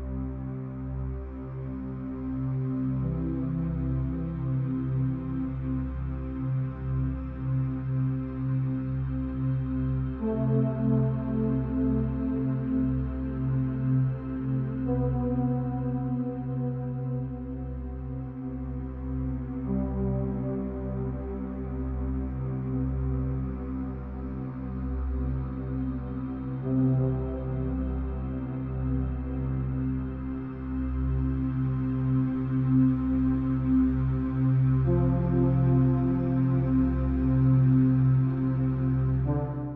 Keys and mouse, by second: 2.0 KP_3, 4.5-6.2 drag, 5.3 0, 6.9-8.0 drag, 8.7 KP_0, 9.5 g, 11.5 F6, 14.5 g, 19.0 shift+d, 20.9 g, 24.5 click.